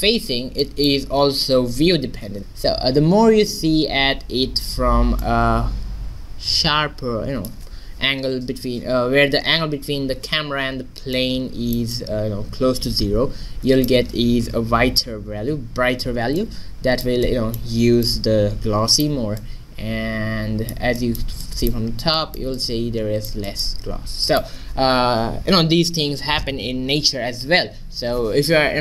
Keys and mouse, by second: 5.2-7.1 middle drag, 13.4 middle click, 16.4 middle click, 21.1-26.2 middle drag.